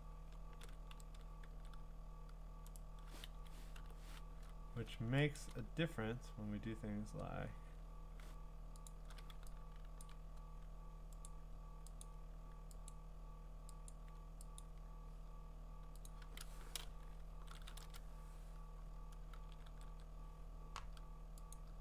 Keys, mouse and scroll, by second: 0.6 ctrl+z, 1.0 ctrl+z, 1.5 e, 2.8 right click, 3.3 Escape, 3.8 u, 5.4 click, 5.5 click, 8.9-10.1 click, 9.8 click, 9.9 click, 10.0 click, 11.3 click, 12.9 click, 14.6 click, 16.1 click, 17.3 ctrl+shift+n, 17.8 Return, 19.7 ctrl+e, 21.5 click.